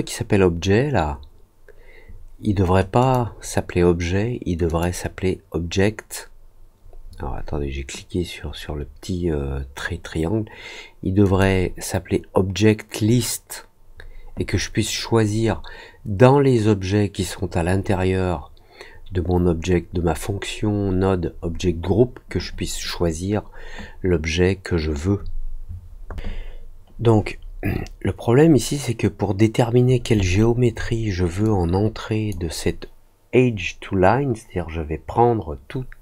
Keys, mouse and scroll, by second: 2.9 click, 4.6 click, 11.2 click, 30.2 alt+middle click, 31.4 click.